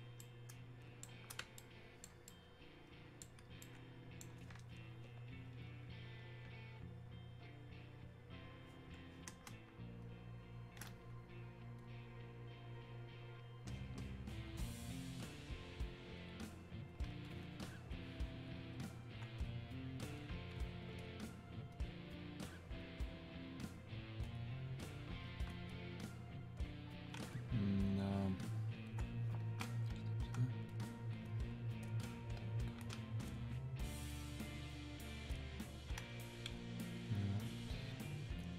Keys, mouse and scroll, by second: 9.5 space, 10.1 click, 10.4 space, 11.8 click, 14.5 click, 18.0 ctrl+click, 24.3-29.5 ctrl+drag, 29.5 Escape, 30.8 click, 33.9 ctrl+click, 37.1-38.5 ctrl+drag.